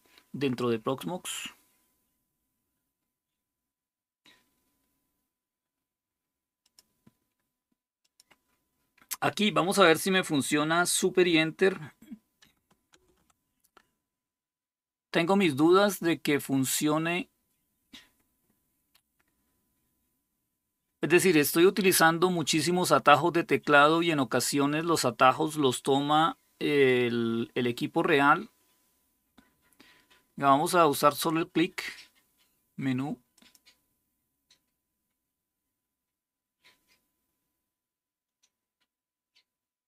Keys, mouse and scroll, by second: 6.4 click, 7.8 click, 12.7 super+Return, 33.1 click.